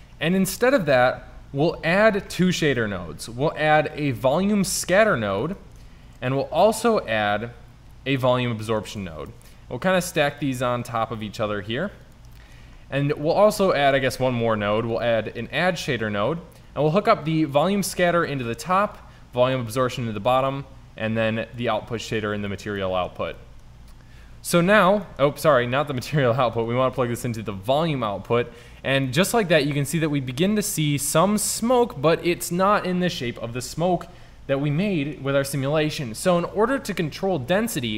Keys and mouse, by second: 0.9 shift+a, 6.1 shift+a, 9.3 shift+Tab, 9.7 g, 11.0 g, 13.9 shift+a, 16.7 click, 19.6 click, 23.0 middle click, 23.6-25.1 drag, 26.7-27.8 drag.